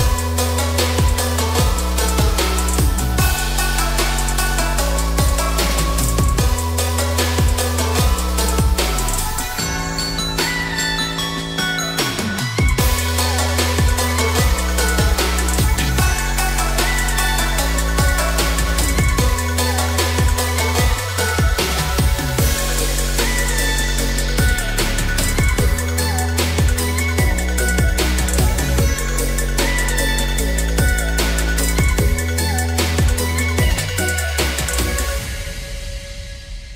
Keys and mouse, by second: 0.3 KP_0, 1.6 KP_Enter, 4.0 KP_1, 5.0 KP_3, 7.3-8.7 shift+middle drag, 9.4 shift+middle click, 13.4 click, 14.3 click, 16.2 g, 24.4 click, 25.6 shift+middle click, 26.7 Tab, 27.1 shift+middle click, 28.0 3, 29.9 middle click, 31.1 shift+click, 31.7 middle click, 32.5 shift+middle click, 34.2 middle click, 34.8 e.